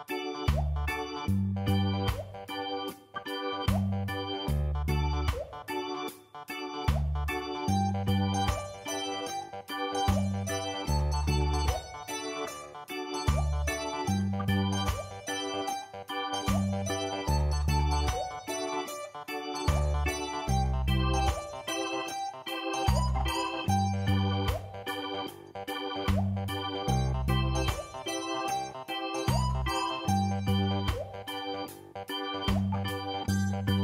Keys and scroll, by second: 1.2 typing, 2.6 ctrl+t, 10.7 v, 28.6 ctrl+t.